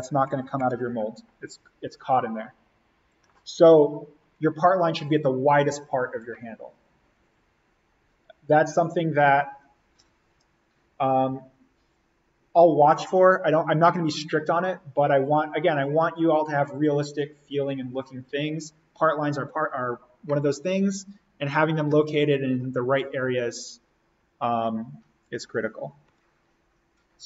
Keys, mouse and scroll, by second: 0.3 click, 26.1 click.